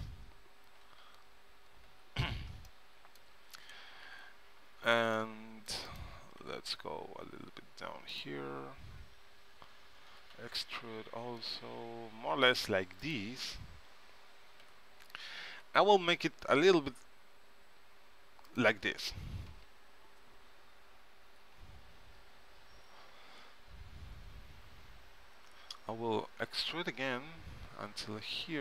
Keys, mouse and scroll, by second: 1.1 z, 2.0 KP_3, 4.2 a, 4.7 c, 6.1-7.9 right drag, 6.5 g, 10.2 e, 14.7 s, 22.0-23.5 middle drag, 26.3 e.